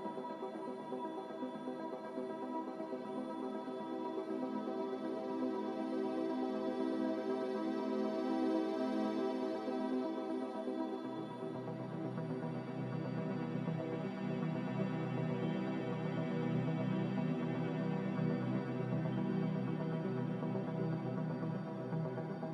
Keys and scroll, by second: 3.0 a, 7.9 n, 9.5 m, 19.5 ctrl+b.